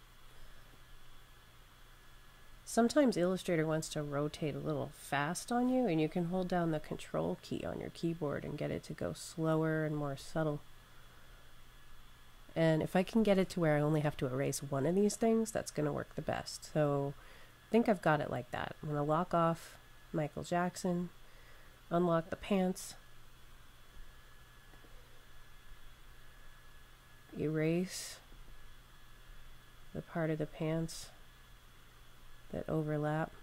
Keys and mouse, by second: 0.6 click, 14.5 click, 18.8 click, 24.6 click, 27.1 click.